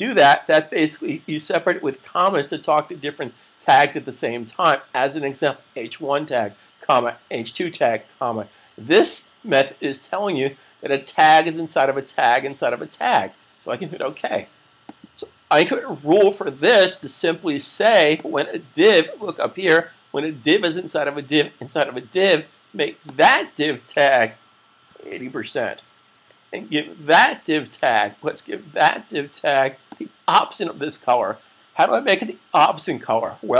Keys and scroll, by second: 24.7-25.9 typing, 28.6 typing.